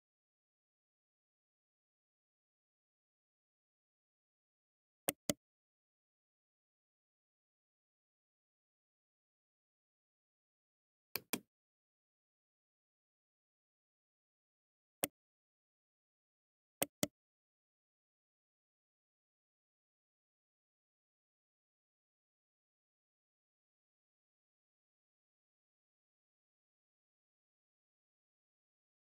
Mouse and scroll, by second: 10.7 click, 14.9 right click, 16.2 right click.